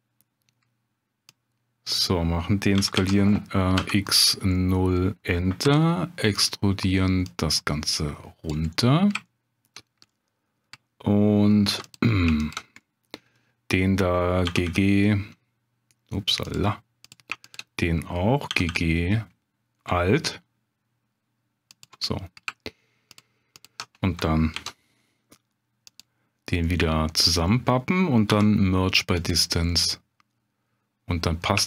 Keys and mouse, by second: 1.3 click, 2.8 s, 3.0 x, 3.8 0, 4.1 click, 4.5 middle click, 5.6 e, 6.3 click, 7.3-8.5 drag, 8.7 middle click, 9.3 shift+click, 10.1 middle click, 11.7 2, 11.9 click, 12.8 click, 14.5 g, 14.6 g, 16.4 click, 17.5 shift+click, 18.5 g, 18.7 g, 21.7 alt+click, 22.1 middle click, 23.1 shift+click, 23.5 shift+click, 24.5 ctrl+b, 25.9 click, 26.7 middle click, 28.3 m, 29.7-31.4 middle drag.